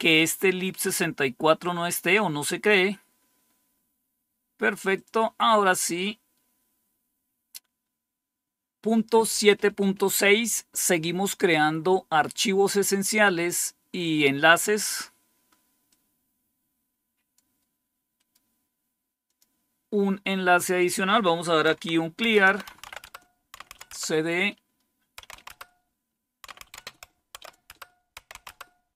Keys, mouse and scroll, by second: 0.3-2.7 drag, 4.8 click, 15.8-17.3 drag, 17.3 click, 18.1-19.2 right drag, 19.2-21.6 drag, 21.6-28.8 typing.